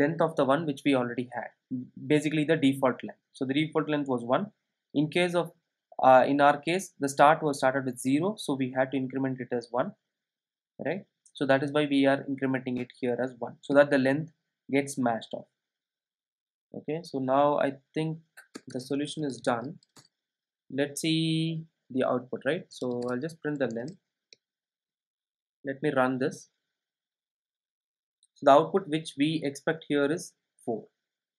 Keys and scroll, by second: 20.0 Return, 25.0 super+s.